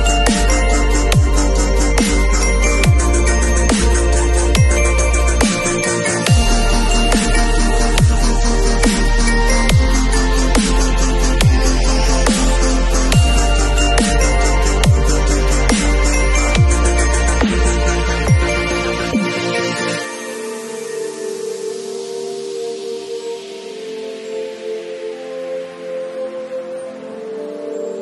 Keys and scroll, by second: 17.4 b, 18.4 ], 22.8 0.